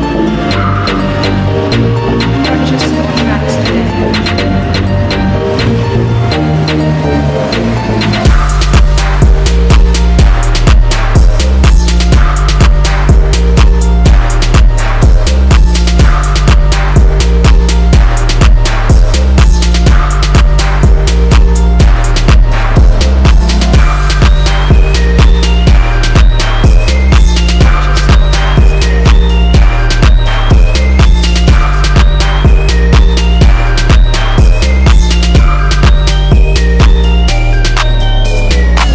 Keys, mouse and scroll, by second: 12.0 ctrl+t, 12.1-13.2 drag, 13.6-14.1 scroll down 1, 14.5 scroll up 1, 14.8 click, 16.2 click, 17.3-20.7 alt+drag, 21.5 click, 22.5 click, 23.4 click, 28.4 ctrl+z, 28.8 click, 29.3 ctrl+z, 29.9 click, 30.3 ctrl+z, 30.8 click, 31.8 ctrl+z, 32.1 click, 33.0 ctrl+z, 33.5 click, 34.2 ctrl+z, 34.4 click, 34.8 ctrl+z, 35.0 click, 35.9 click, 36.9 click, 37.7 ctrl+z.